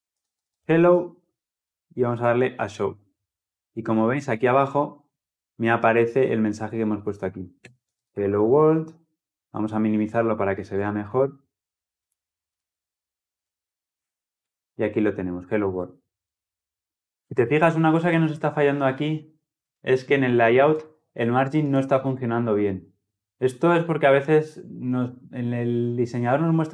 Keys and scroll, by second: 17.0 ctrl+alt+Left.